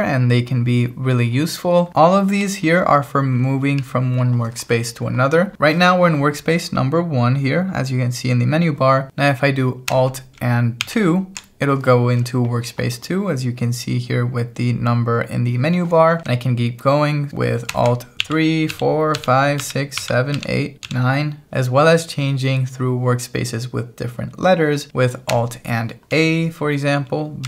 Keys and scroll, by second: 2.1 k, 3.8 j, 10.9 alt+2.